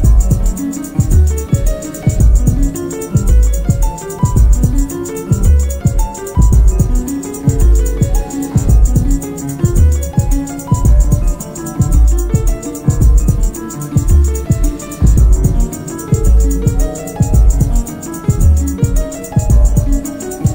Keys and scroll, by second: 4.7 shift+h, 4.9 shift+e, 5.0 shift+a, 5.0 shift+d, 5.1 Return, 6.6 shift+n, 6.8 shift+e, 6.9 shift+c, 7.1 shift+k, 7.2 Return, 8.2 shift+c, 8.3 shift+h, 8.5 shift+e, 8.6 shift+t, 8.7 Return, 11.3 ctrl+d, 11.6 Escape, 16.6 shift+r, 16.7 shift+o, 17.1 shift+t, 17.2 Return, 18.2 ctrl+d, 19.7 F1.